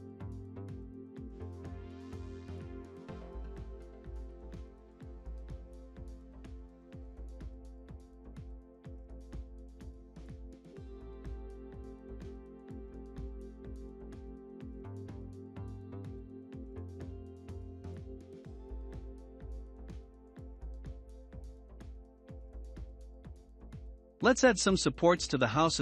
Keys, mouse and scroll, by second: 0.2 scroll down 2, 0.9-1.8 middle drag, 1.8 click, 4.0 n, 5.3 click, 6.3 click, 7.6 click, 8.4 n, 9.3-12.3 middle drag, 16.0 n, 16.9 click, 17.4 n, 18.0 click, 19.8-20.9 scroll up 1, 20.9-21.8 middle drag, 21.8 click, 22.7 click, 23.1 scroll up 4, 23.6-24.7 middle drag, 24.7 click.